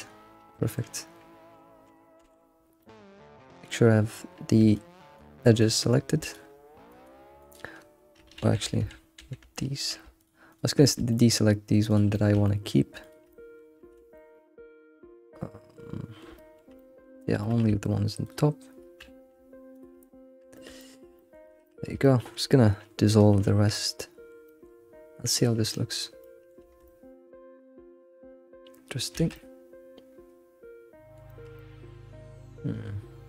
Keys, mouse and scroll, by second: 0.7-2.2 middle drag, 2.2 2, 2.8-4.1 middle drag, 4.1-4.7 scroll up 1, 4.7 ctrl+click, 5.4 ctrl+click, 6.2 click, 6.9 click, 8.4 ctrl+z, 8.6 ctrl+z, 10.2 alt+shift+click, 10.5 alt+shift+click, 10.8-11.9 middle drag, 11.9 click, 12.2 shift+middle click, 13.0 alt+shift+click, 13.3 middle click, 13.9 ctrl+z, 14.1-16.5 middle drag, 16.8-18.2 middle drag, 18.2 alt+shift+click, 19.7 shift+click, 20.0-21.8 middle drag, 22.2 middle click, 23.3 right click, 23.7-25.4 middle drag, 25.4 click, 25.7 middle click, 26.6 alt+shift+z, 26.8-29.2 middle drag, 29.2 alt+shift+z, 29.4 middle click, 30.5 middle click, 31.3-33.2 shift+middle drag.